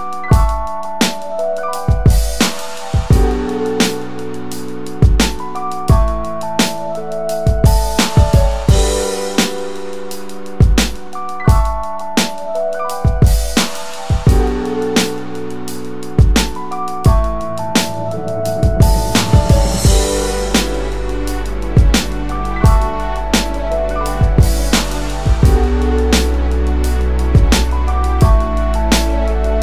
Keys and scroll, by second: 4.1 space, 8.9-9.7 typing, 13.3 space, 20.1-20.9 typing.